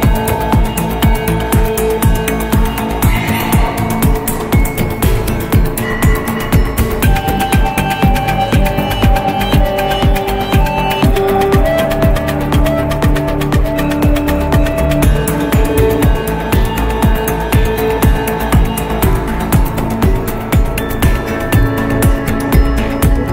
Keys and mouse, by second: 0.6 click, 0.9-8.4 drag, 14.2 click, 14.9 middle click, 16.4 Tab, 17.9-19.5 middle drag, 20.1 middle click.